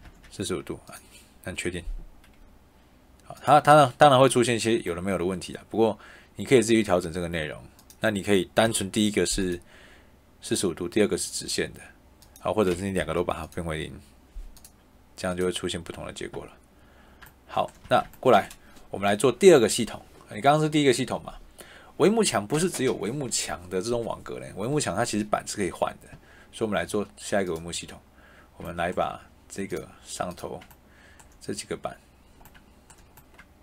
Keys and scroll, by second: 8.5 0, 12.9 0, 17.7 Escape.